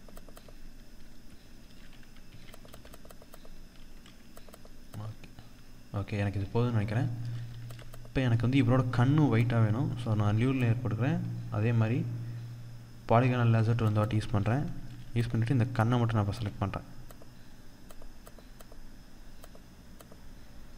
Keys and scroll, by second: 1.0 ctrl+0, 4.8 ctrl+0, 5.8 ctrl+=, 6.9 ctrl+=, 7.7 ctrl+=, 13.2 ctrl+space, 14.0 ctrl+=.